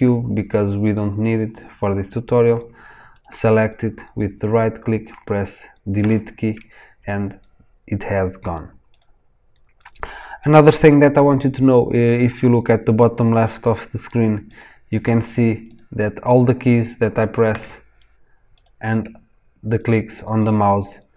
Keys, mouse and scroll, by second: 3.0 click, 3.6 click, 5.9 Delete, 8.8 click, 9.7 click, 14.4 click, 15.6 click, 17.4 k, 18.5 click, 19.7 click, 20.3 click.